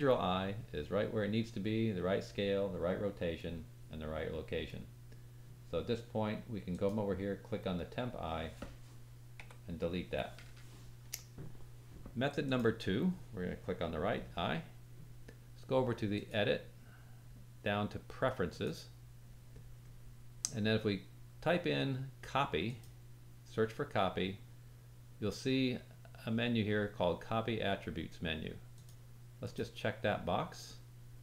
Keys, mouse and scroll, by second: 6.7 click, 7.0-12.1 drag, 9.3 Delete, 12.4-31.2 drag, 12.4 middle click, 12.4 right click, 21.1-31.2 middle drag, 21.1-31.2 right drag.